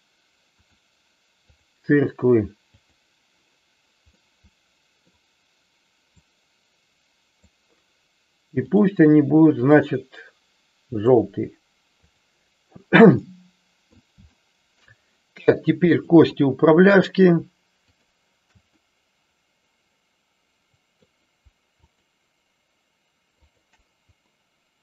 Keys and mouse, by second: 0.5-1.6 drag, 2.6 click, 4.3-5.1 middle drag, 6.1-8.7 drag, 9.6-11.2 drag, 12.2 click, 13.3 middle click, 14.4 shift+middle click, 15.9-17.3 drag, 17.8-19.2 shift+drag, 19.4-21.1 middle drag.